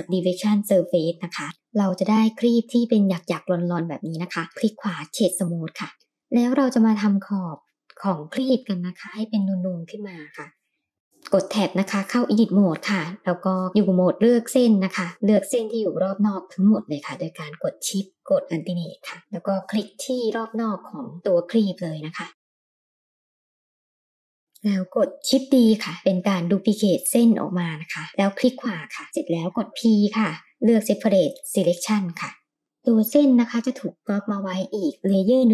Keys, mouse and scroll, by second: 0.2-0.9 middle drag, 2.2-2.6 middle drag, 3.0-3.3 middle drag, 3.8 right click, 5.9 middle click, 11.0 Tab, 11.0 click, 11.0 middle click, 20.9 alt+click, 22.6 alt+shift+click, 23.3 middle click, 23.7 alt+shift+click, 24.0 middle click, 25.6 shift+d, 29.0 p, 33.8 click, 34.9 click, 35.2 drag.